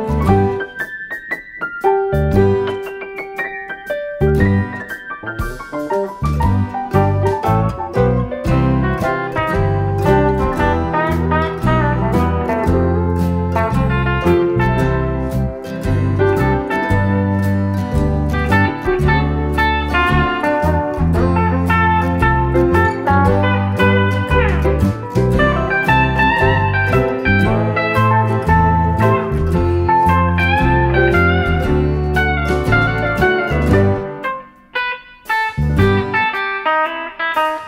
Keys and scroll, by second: 0.6 F1, 2.6 Delete, 3.3 shift+F6, 7.4 F1, 8.4 Page_Down, 9.5 ctrl+-, 9.8 Page_Down, 10.3 typing, 22.2 ctrl+d, 22.8 ctrl+*, 23.4 ctrl+-, 23.7 typing, 24.9 space, 27.1 F7, 28.0 F1, 29.5 typing, 31.6 shift+F6, 35.2 F7, 35.7 Page_Down, 36.0 F1, 36.4 Page_Down, 36.8 Page_Down.